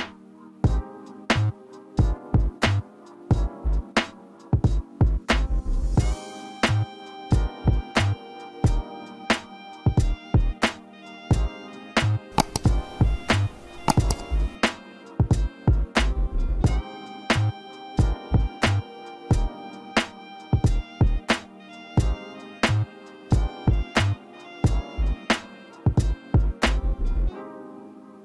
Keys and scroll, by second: 0.0 ctrl+alt+space.